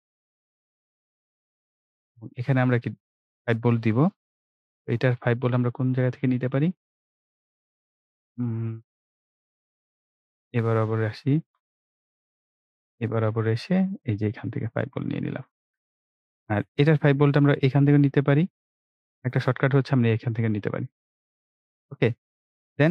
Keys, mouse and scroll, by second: 0.7-1.1 ctrl+scroll up 1, 1.1 ctrl+scroll down 1, 8.0 click, 11.7 click, 19.1 click.